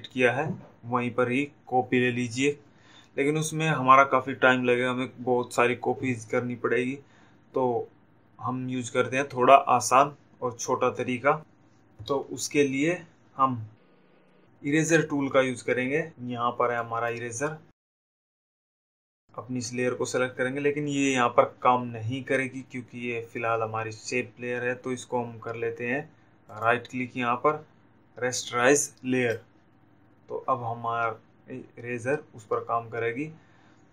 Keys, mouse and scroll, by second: 17.7 click, 19.5 click, 27.9 right click, 31.1 click.